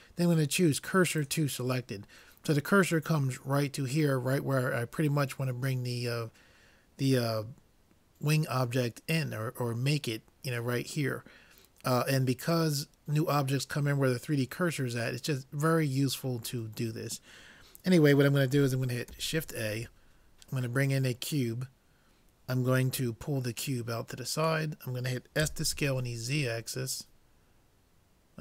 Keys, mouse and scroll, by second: 19.1 shift+a, 23.6-25.4 drag, 25.5 s.